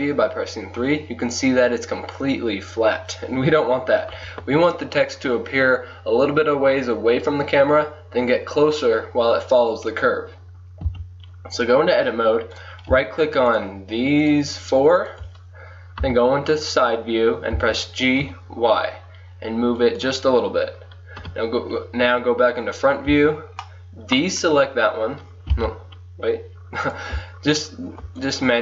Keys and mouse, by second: 4.1 KP_1, 10.9 Tab, 12.6-17.6 drag, 16.1 KP_3, 17.6 g, 21.2 KP_1, 23.2 b, 25.6 a, 27.0-28.6 drag.